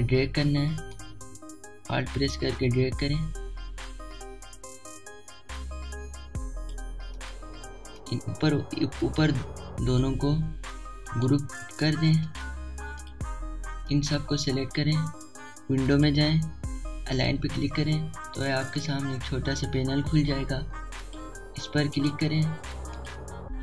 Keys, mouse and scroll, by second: 2.0-12.1 alt+drag, 12.1 right click, 13.3-22.9 drag.